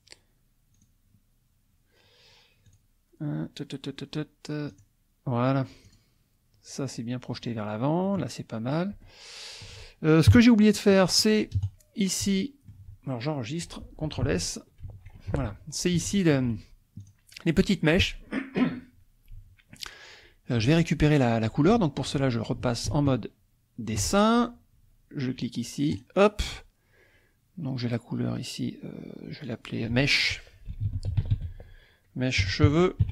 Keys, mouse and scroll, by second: 0.7 click, 2.6 click, 4.7 click, 6.0 click, 7.4 click, 9.0 shift+click, 10.3 KP_1, 11.0 shift+click, 11.4-12.9 shift+middle drag, 11.6 shift+KP_0, 14.8 ctrl+s, 16.0 shift+middle click, 17.1 click, 22.9 ctrl+Tab, 25.9 click, 29.4 click, 30.7-31.3 typing, 32.7-33.1 typing.